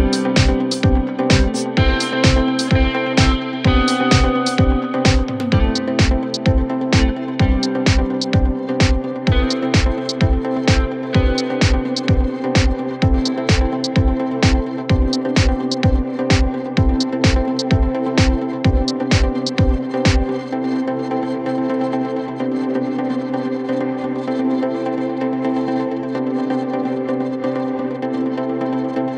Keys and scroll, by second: 3.4 2, 4.6 ctrl+z, 7.8 F1, 7.9 F2, 8.3 ctrl+d, 8.7 F1, 9.1 Escape, 11.7-13.7 typing, 14.1 F3, 15.2 F1, 15.4 F2, 18.7 F1, 19.1 ctrl+d, 19.1 Escape, 24.7 p, 26.2 F1, 26.3 F2, 26.9 ctrl+d.